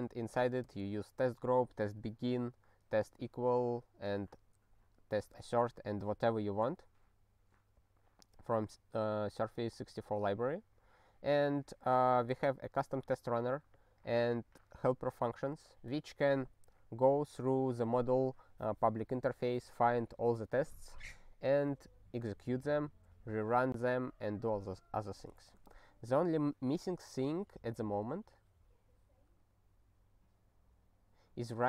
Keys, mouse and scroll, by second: 0.6 ctrl+g, 6.9 scroll down 3, 8.8-10.5 scroll up 1, 10.7 click, 10.9 click, 11.6 click, 29.7 scroll down 3, 31.0 scroll up 3.